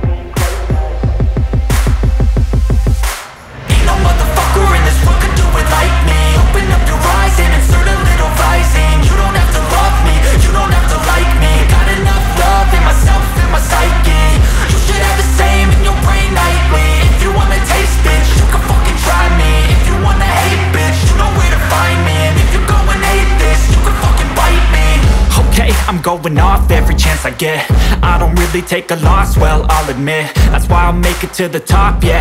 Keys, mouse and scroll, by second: 17.3 ctrl+super+z, 18.7 ctrl+super+z, 18.9 right click, 19.9 ctrl+super+z, 21.6 ctrl+super+z, 22.8 ctrl+super+z, 29.7 ctrl+super+z, 31.0 ctrl+super+z.